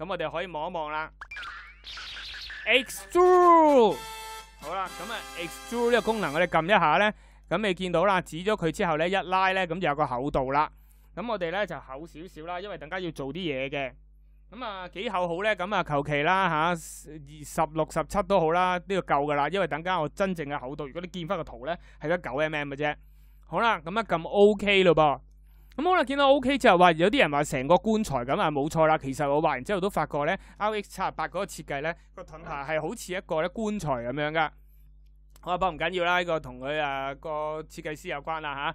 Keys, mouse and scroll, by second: 1.1 e.